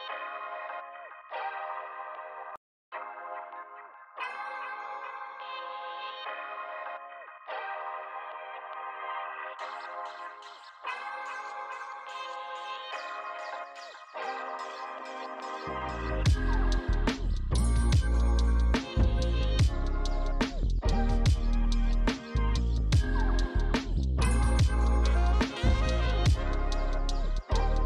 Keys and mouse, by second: 1.2 f, 1.2 click, 2.0 f, 2.1 shift+click, 5.6 f, 5.7 click, 5.8 f, 5.8 click, 6.2 f, 6.3 click, 6.9 f, 7.0 click, 9.2 click, 9.7 f, 10.8 click, 11.1 click, 11.3 f, 11.4 click, 11.9 f, 13.0 click, 14.5 click, 14.7 f, 14.8 click, 16.0-18.1 typing, 16.5 click, 17.2 click, 17.6 click, 18.2 click, 20.5 click, 20.8 shift+click, 20.9 shift+click, 24.5 click, 24.7 f, 24.7 click.